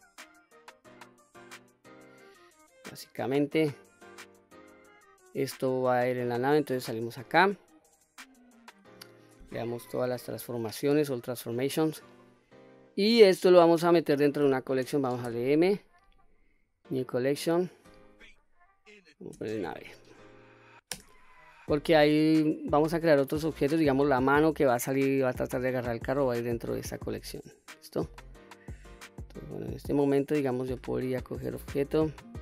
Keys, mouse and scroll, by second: 1.0-1.3 middle drag, 1.5-2.0 scroll down 1, 2.0 middle click, 4.9-5.5 middle drag, 6.6 Tab, 8.0-9.0 middle drag, 9.8 ctrl+a, 11.3 scroll up 1, 11.8-12.6 middle drag, 12.9 click, 14.9 m, 26.7-27.4 middle drag, 27.8-28.4 middle drag, 29.2-29.9 middle drag, 31.8-32.4 drag.